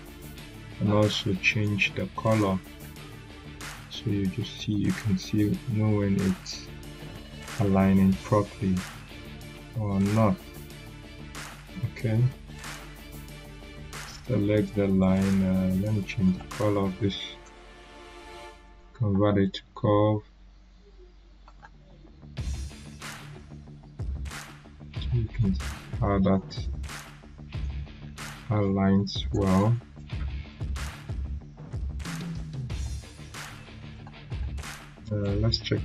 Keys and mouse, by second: 2.6 right click, 2.6 right click, 8.7-10.0 drag, 14.9 click, 14.9 click, 16.2 right click, 17.4 click, 19.4 right click, 21.4-23.4 drag, 34.2 right click, 35.2 click.